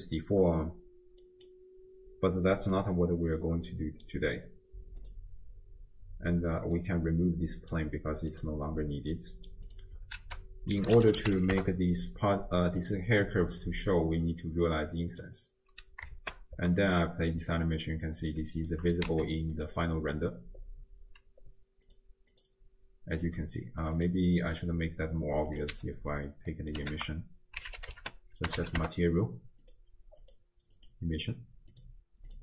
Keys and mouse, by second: 2.8-4.1 middle drag, 5.1 click, 7.0 click, 8.3 click, 9.3 middle click, 9.7 click, 10.2 ctrl+a, 13.6 click, 14.3 middle click, 14.8 click, 16.2 shift+space, 18.4 space, 18.9 click, 19.1 z, 21.9 click, 24.8 drag, 25.5 click, 26.5 click, 26.9 ctrl+a, 30.2 click, 31.7 click.